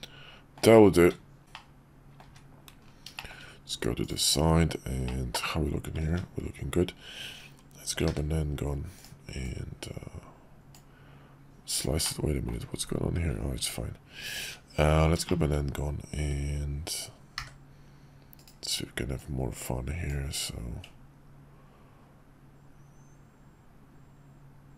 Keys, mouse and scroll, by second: 1.0 `, 1.5-2.2 middle drag, 2.3 `, 3.1 shift+middle click, 5.1-6.0 middle drag, 8.0 d, 9.5-10.8 drag, 12.0-12.5 middle drag, 14.1 `, 14.2 `, 14.4 `, 15.3 shift+middle click, 17.4 d, 19.1-20.1 drag.